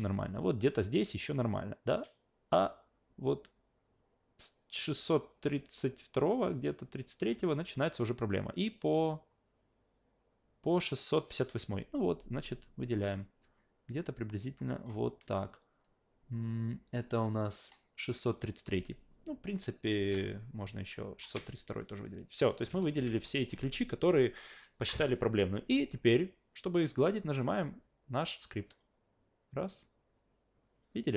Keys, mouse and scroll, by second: 8.0-11.1 drag, 13.0-14.8 drag, 16.4-18.3 drag, 20.3 shift+click, 22.9 shift+f, 28.7 shift+click.